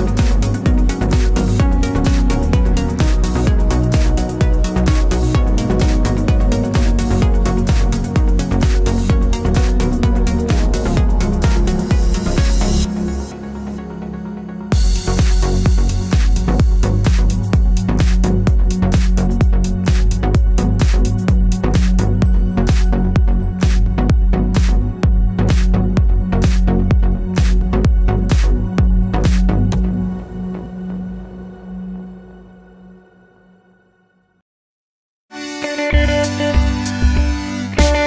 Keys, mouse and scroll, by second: 0.2 click, 0.2-1.2 middle drag, 0.6-0.9 scroll up 2, 0.9 Tab, 1.2 1, 1.2 click, 1.8 shift+click, 2.6 middle click, 3.0 r, 3.6 shift+click, 3.8 e, 5.7 click, 6.2 ctrl+click, 6.9 click, 7.1 shift+click, 7.3 e, 8.3 click, 8.4 r, 10.4 click, 11.3 Tab, 11.4 middle click, 11.8 click, 12.1 scroll down 2, 12.2-16.9 middle drag, 16.9 click, 17.0 Tab, 17.4-19.0 middle drag, 17.8 Tab, 18.4 3, 19.0 click, 19.2 2, 19.3 click, 19.7 shift+click, 20.5-21.9 middle drag, 21.0 shift+d, 21.6 Tab, 22.4 click, 22.5 Tab, 23.2 l, 24.1 1, 24.8 click, 25.4 a, 26.2-27.3 drag, 26.4 ctrl+a, 27.3-30.2 shift+middle drag, 27.5-27.9 scroll up 1, 28.1 ctrl+a, 29.0 Tab, 29.3 g, 30.2 click, 30.3 Tab, 31.5 z, 31.9 click, 32.3 e, 33.2 click, 33.7 e, 34.1 Tab, 34.4 z, 34.5 scroll down 1, 34.6 click, 34.8-35.5 middle drag, 35.5 click, 35.6 Tab, 35.9 click, 36.0 Tab, 36.1 middle click, 36.4 click, 36.7 e.